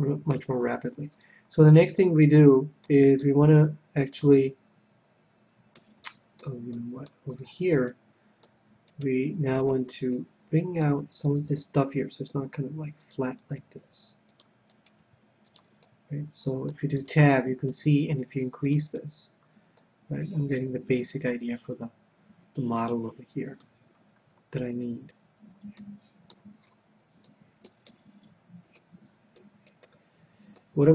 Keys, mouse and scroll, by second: 1.5-5.7 middle drag, 6.0-9.6 middle drag, 8.8-11.3 right drag, 10.1-11.7 middle drag, 11.4 g, 13.1-17.3 drag, 13.4-17.2 right drag, 13.8 g, 15.0 g, 15.8 middle click, 17.0 Tab, 17.2-19.1 middle drag, 18.5-20.5 drag, 19.8-21.5 middle drag, 23.6 KP_1, 25.8-29.1 middle drag, 28.1 Tab, 28.8 Tab, 29.4 Tab.